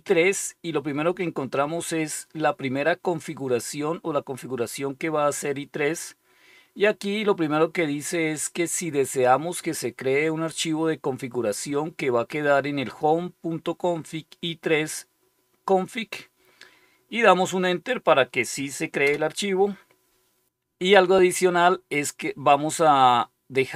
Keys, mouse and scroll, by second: 18.9 Return.